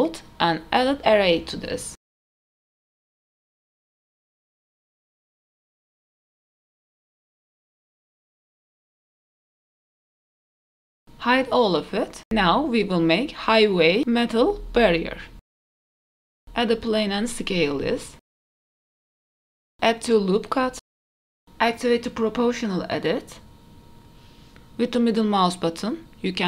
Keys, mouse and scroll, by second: 1.0-2.0 scroll down 1, 2.0 click, 3.6 click, 4.5-5.9 drag, 5.9 KP_Decimal, 8.1 click, 8.6 click, 9.0 middle click, 9.6 KP_0, 10.8 click, 10.8 n, 12.0 h, 12.3 shift+middle click, 12.3 scroll up 1, 12.7 shift+a, 14.9-15.2 middle drag, 15.8 KP_Decimal, 16.2-16.7 scroll down 2, 16.5 middle drag, 17.1 r, 17.7 KP_3, 18.0 KP_1, 18.2 middle click, 18.4 s, 19.1 click, 19.3 middle click, 19.5 KP_1, 19.6 KP_3, 19.7 scroll up 2, 20.0 ctrl+r, 21.4 Tab, 21.4 shift+middle click, 21.4-22.0 scroll up 1, 21.4 KP_3, 22.0 click, 22.8 alt+click, 22.8 scroll down 2, 23.7 alt+click, 24.2 alt+shift+click, 25.2 g.